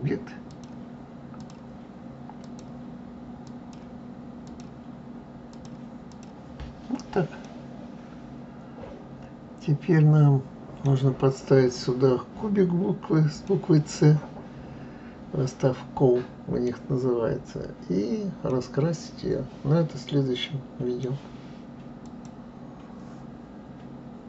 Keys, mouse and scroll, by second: 1.3-2.5 drag, 3.4 click, 4.4 click, 5.5 click, 6.1 click, 6.7-7.1 scroll down 1, 7.4-10.4 middle drag, 11.1-11.7 scroll down 3, 11.7-12.5 scroll up 4, 12.6-13.4 scroll down 2, 13.4-16.4 middle drag, 17.6 scroll up 1, 18.4-21.5 middle drag.